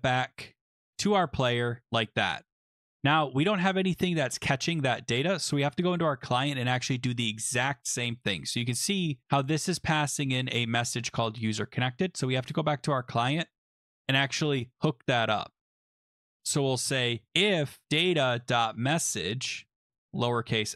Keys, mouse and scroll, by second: 1.6 click, 2.9 click, 5.1 click, 5.7 click, 6.2-7.5 scroll, 8.2 click, 11.0 click, 11.9 click, 12.6 scroll, 13.5-15.9 scroll, 16.1 click, 16.4 Return, 16.6 Return, 16.8-19.2 typing, 17.8-20.0 drag, 19.8 Left, 19.9 Left, 20.0 Left, 20.0 Left, 20.2 Left, 20.5 Left.